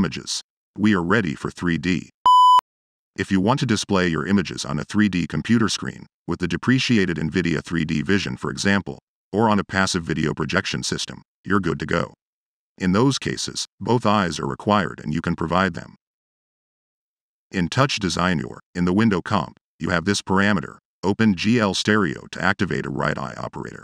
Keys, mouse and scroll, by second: 2.6 Return.